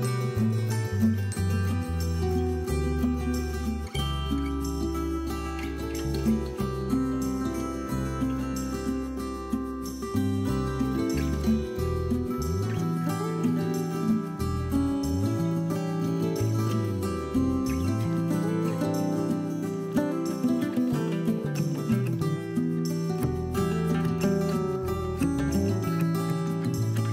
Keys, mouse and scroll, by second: 0.0 scroll down 1, 0.2 click, 0.3 middle click, 0.5 KP_3, 0.8-1.1 scroll up 2, 1.1 s, 2.9 click, 3.0 scroll down 2, 3.1-3.5 middle drag, 3.5 scroll up 2, 3.8 KP_1, 4.6 g, 6.0 click, 6.5 g, 7.4 click, 7.6 scroll down 1, 7.7-9.9 middle drag, 8.5 scroll up 1, 8.7 scroll down 1, 8.9 KP_1, 9.4 scroll up 1, 9.6 scroll down 1, 9.9 click, 10.1 Tab, 10.3 scroll up 1, 10.8 click, 11.3 b, 13.3 click, 13.4 scroll down 1, 13.6 middle click, 13.8 scroll up 1, 14.1 KP_1, 14.5 click, 14.7 scroll up 1, 14.8 scroll down 1, 15.0-16.4 shift+middle drag, 15.8 c, 16.4 right click, 16.7 g, 18.4 click, 18.6 scroll down 1, 18.7-20.5 middle drag, 19.2 scroll up 2, 19.9-20.7 scroll down 3, 20.1 KP_3, 20.5 click, 20.7 middle click, 20.8-21.3 scroll up 2, 21.3 click, 21.4-24.7 middle drag, 21.7 Tab, 24.1 scroll up 2, 24.4 scroll down 2, 24.7 click, 24.9-26.0 middle drag, 25.1 shift+a, 26.0 scroll up 1, 26.1-26.4 scroll down 1, 26.5 s.